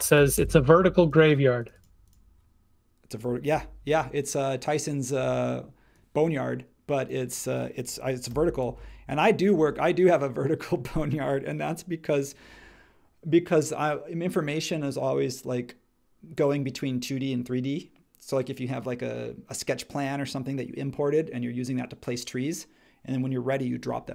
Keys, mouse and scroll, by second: 0.0-0.8 typing, 3.5 m, 8.3 m.